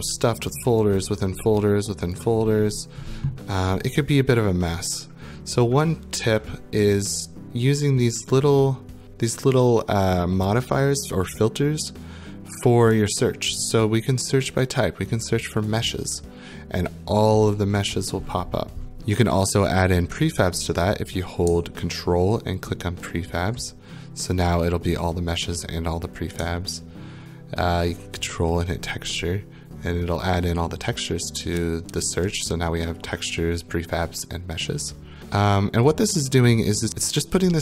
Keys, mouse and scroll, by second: 0.0-0.5 scroll, 0.5 click, 1.0 scroll, 1.5 click, 1.7-2.2 scroll, 2.2 click, 2.4 scroll, 3.0-3.4 scroll, 3.8 click, 13.6 click, 15.7 click, 17.0-18.9 scroll, 19.0 ctrl+click, 22.7 ctrl+click, 28.4 ctrl+click, 32.0-33.7 scroll.